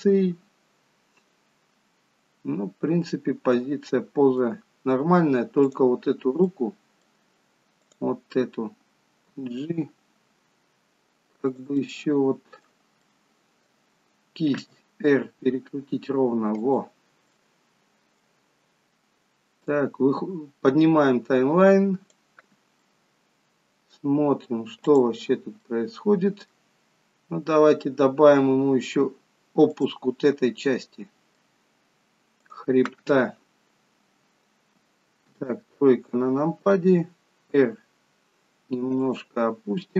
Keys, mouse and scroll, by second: 5.8 click, 6.6 middle click, 7.8 click, 9.4 g, 11.8 middle click, 13.2 middle click, 14.8 r, 17.4 middle click, 20.0 click, 22.9 middle click, 24.9 click, 25.7 middle click, 27.0 click, 27.9-28.3 scroll up 4, 29.8 click, 30.6-31.0 scroll down 1, 31.0 middle click, 32.5 click, 33.9 scroll down 2, 35.5 KP_3, 37.0 r.